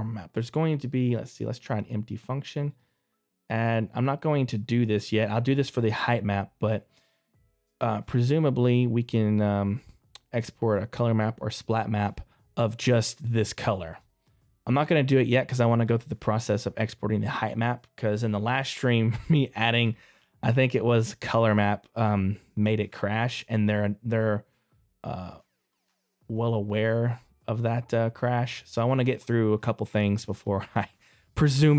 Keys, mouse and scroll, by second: 29.6 middle click, 30.1 right click, 30.6 middle click.